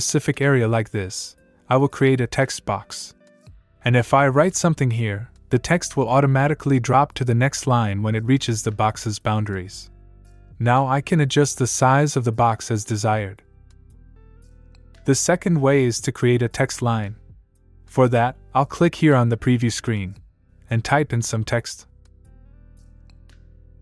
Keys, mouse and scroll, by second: 3.6-6.5 typing, 6.6 click, 16.1 click, 18.5 click, 18.8-21.6 typing, 22.5 click.